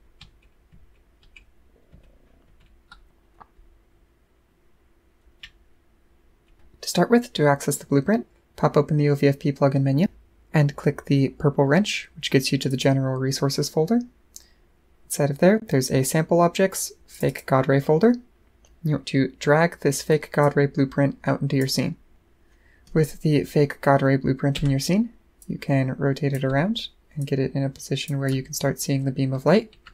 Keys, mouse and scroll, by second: 12.7 click, 17.1 click, 17.3 click, 20.4-21.6 drag, 25.4 click, 27.2 click, 28.2-29.9 right drag.